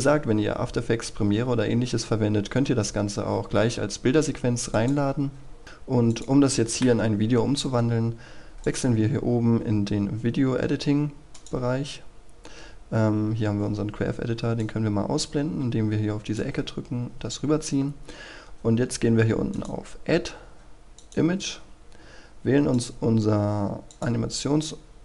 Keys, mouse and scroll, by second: 4.8 click, 6.7 Escape, 8.6-24.9 drag.